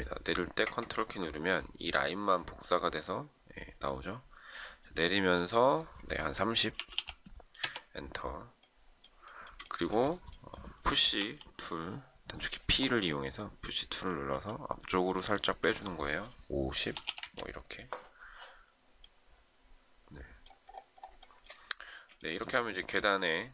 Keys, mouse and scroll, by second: 6.4-7.3 typing, 7.6 Return, 9.2 shift+middle click, 11.1 p, 16.6 typing, 17.0 Return, 21.2 shift+middle click.